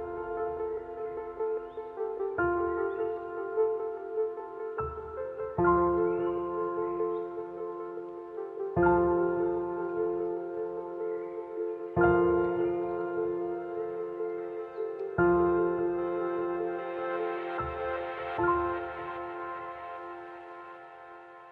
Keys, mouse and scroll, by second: 5.6-12.2 drag, 15.0 click, 18.7 click, 18.8 q, 20.7 click.